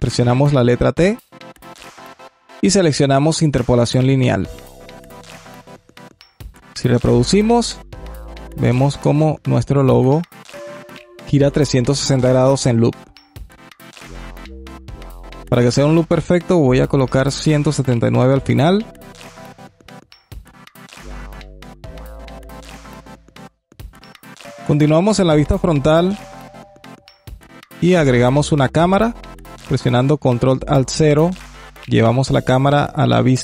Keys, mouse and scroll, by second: 6.8 click, 15.1-19.0 drag, 19.4-20.9 drag, 20.9 space, 23.7-24.5 drag, 24.5 KP_1, 25.0-25.7 alt+middle drag, 25.7-26.7 scroll up 1, 26.7 shift+a, 30.9 ctrl+alt+KP_0, 32.5 n.